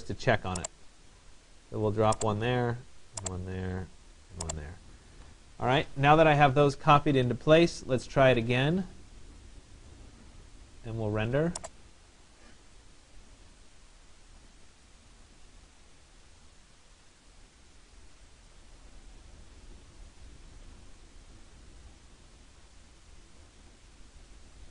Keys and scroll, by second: 4.7 Escape.